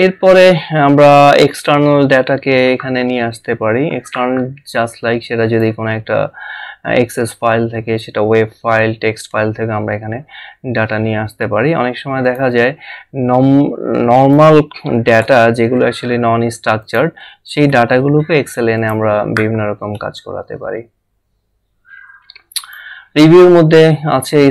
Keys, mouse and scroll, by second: 5.4 click, 12.6 click, 16.8 click, 18.8 click, 22.6 click.